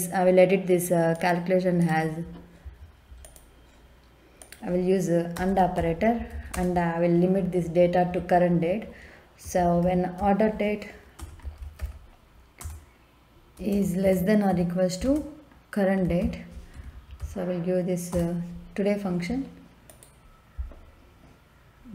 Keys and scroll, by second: 5.3-6.5 typing, 9.4 o, 9.8 r, 10.1 e, 11.1 BackSpace, 11.4 d, 11.5 e, 11.7 r, 12.6 Return, 13.5 space, 14.0 shift+,, 14.5 =, 15.0 space, 16.0 t, 16.2 o, 16.9 a, 17.2 y, 18.1 Return.